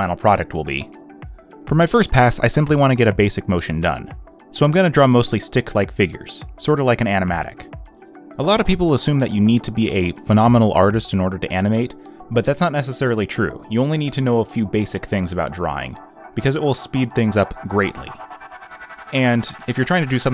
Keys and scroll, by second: 0.4 ctrl+z, 1.4 ctrl+z, 1.7 space, 1.9 z, 2.1 space, 2.4 z, 4.0 space, 4.4 b, 5.0 ctrl+z, 6.4 ctrl+z, 16.6 ctrl+z, 17.6 z, 17.9 space, 18.7 ctrl+z, 19.7 ctrl+z.